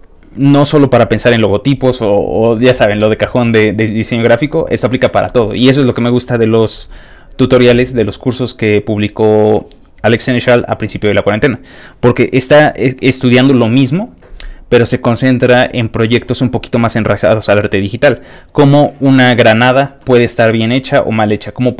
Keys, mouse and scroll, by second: 8.9 scroll up 2, 10.3-10.7 scroll up 2, 11.5-14.0 scroll down 5, 15.1 middle click, 15.7 middle click, 16.6-18.0 middle drag, 18.1 middle click, 18.8 click, 20.7-21.0 scroll down 3.